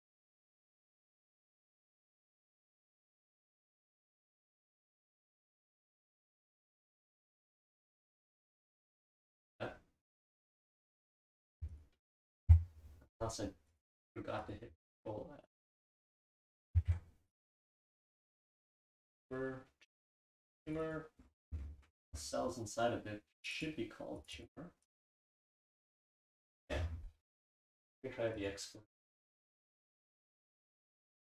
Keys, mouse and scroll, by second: 4.3-6.2 right drag, 16.1 click, 18.1 click, 18.5 click, 19.0 click, 19.3 click, 20.0 click, 20.7 click, 20.8 click, 21.2-26.1 scroll up 1, 23.4 click, 23.7 click, 24.2 click, 26.1-26.7 scroll up 1, 26.7-28.1 scroll down 1, 27.3 click, 27.5 click, 28.1-29.1 scroll down 1, 28.4 click.